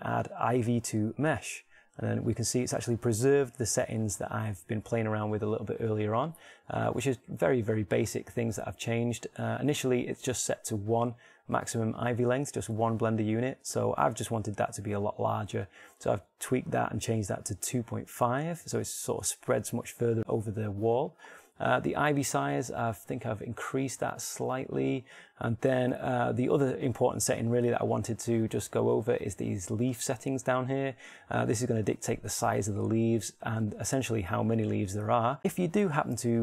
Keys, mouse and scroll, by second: 7.0-21.4 middle drag, 24.2-26.9 middle drag, 35.6 shift+middle click.